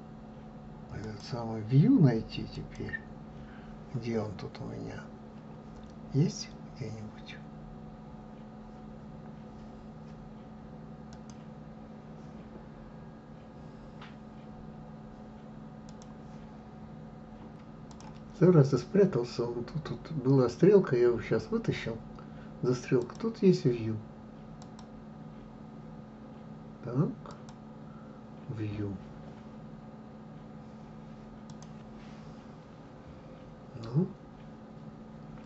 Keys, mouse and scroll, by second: 1.1 click, 2.7 click.